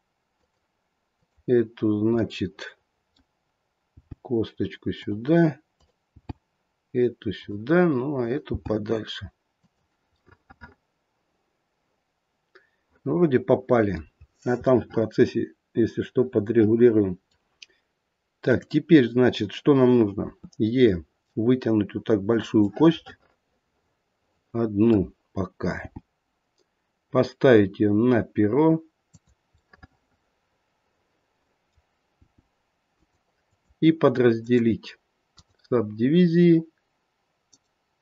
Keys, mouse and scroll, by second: 1.1 click, 2.2 middle click, 3.9 g, 5.7 click, 6.1 g, 8.1 click, 8.5 g, 10.2 middle click, 14.2-14.7 scroll down 2, 14.7 middle click, 15.8 middle click, 18.4 click, 20.3 e, 22.6 middle click, 25.8 g, 29.6 middle click, 32.1 g, 33.4 click, 34.3 right click.